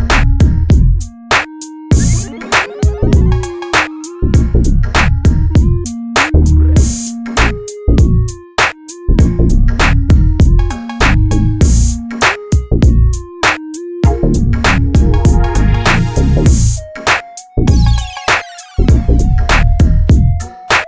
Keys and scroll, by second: 2.2 ctrl+a, 3.3 ctrl+a, 10.5 Escape, 10.8 Delete, 12.4 space, 17.2 Down, 18.7 Up, 19.3 Right, 20.4 Right.